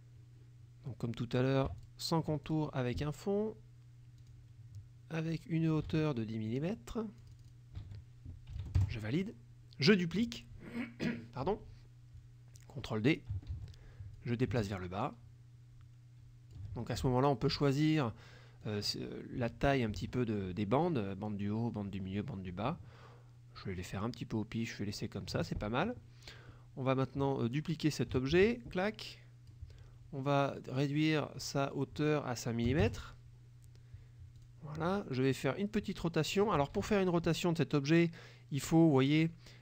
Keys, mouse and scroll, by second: 1.9 shift+click, 2.5 shift+click, 4.3 click, 5.9 ctrl+a, 7.3 click, 7.9 ctrl+a, 8.6 KP_1, 8.7 KP_0, 8.8 KP_Enter, 13.6 ctrl+d, 14.3-16.8 ctrl+drag, 18.7-20.1 drag, 20.9-25.6 drag, 28.5 ctrl+d, 29.0 ctrl+click, 31.8 click, 32.7 KP_5, 32.9 KP_Enter, 34.5 click, 35.2-36.5 drag, 36.8 ctrl+z, 39.2 click.